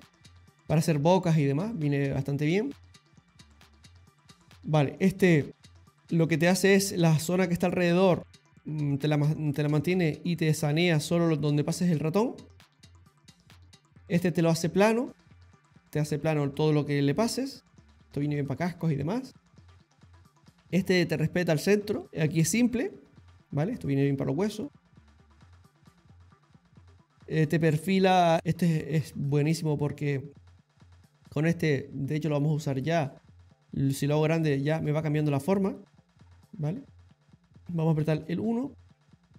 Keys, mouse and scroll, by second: 4.3 click, 13.2 click, 19.3 click, 25.9 click, 28.4 click, 29.6-30.9 ctrl+middle click, 32.9 click, 34.6 click, 35.5 click, 37.3 middle click, 38.1 KP_1.